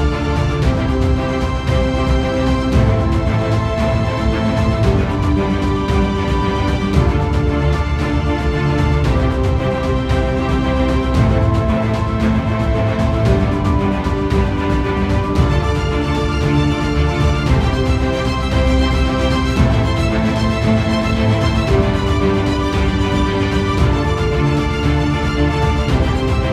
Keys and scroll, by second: 15.7 ctrl+0, 16.1 ctrl+z.